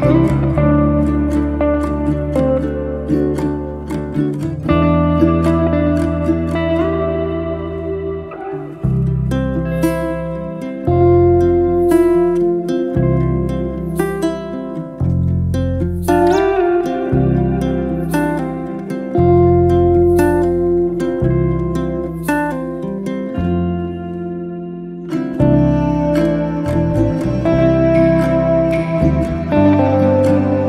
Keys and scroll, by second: 3.2 e, 6.8 space, 9.9 p, 11.3-12.7 typing, 13.8 Return, 19.1 space, 21.9 t, 23.9 2, 24.3 9, 25.1 Return, 27.7 5, 28.0 0, 28.5 Return, 29.4 space.